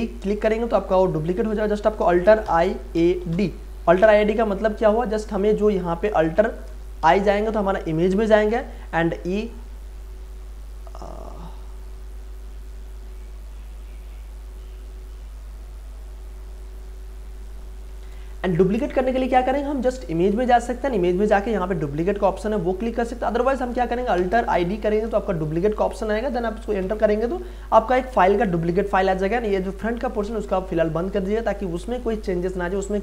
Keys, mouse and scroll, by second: 1.3 click, 2.5 alt+i, 2.7-3.8 typing, 5.1 click, 7.0 alt+i, 16.6 click, 20.7 click, 23.4 click, 24.1 alt+i, 24.5 d, 30.2 click.